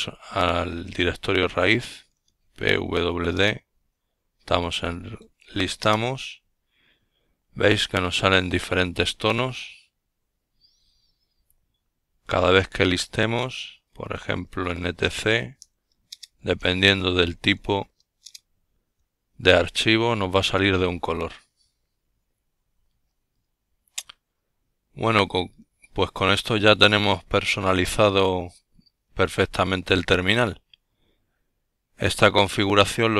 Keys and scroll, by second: 0.8-2.2 typing, 22.1 ctrl+l.